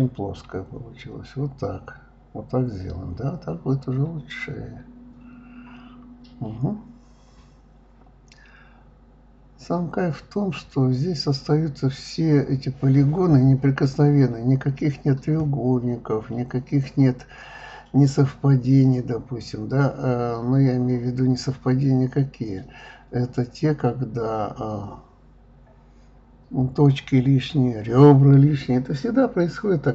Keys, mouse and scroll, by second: 1.5-3.1 middle drag, 4.0-4.3 scroll down 2, 4.3-5.8 scroll up 2, 6.4-6.8 scroll up 4, 6.8 scroll down 2, 7.1-8.6 middle drag, 11.4 scroll down 1, 11.7-12.0 scroll up 1, 12.0-13.6 shift+middle drag, 13.6-15.2 middle drag, 16.0 click, 16.9 click, 17.7 click, 18.7 s, 21.6 click, 21.8-23.2 middle drag, 23.2 click, 23.5 middle click, 24.3 shift+click, 24.8-25.9 middle drag, 25.9 g, 27.1 click, 27.3-28.8 middle drag, 29.8 middle click.